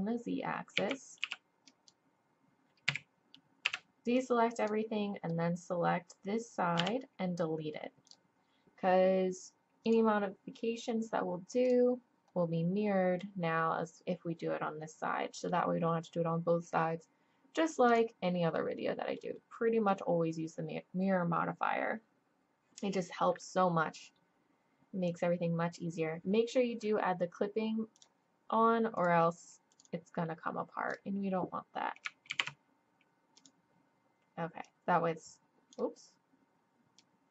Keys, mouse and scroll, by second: 0.8 z, 1.3 b, 2.9 a, 3.6 b, 6.8 x, 9.8 click, 10.6-11.6 drag, 11.6-13.0 middle drag, 13.0-17.3 drag, 17.3-17.9 middle drag, 17.9-18.9 drag, 21.2-27.9 middle drag, 27.9-31.8 drag, 29.0-30.9 right drag, 31.6 middle click, 32.3 ctrl+z, 33.4-34.6 drag, 35.7 click, 37.0-37.3 drag.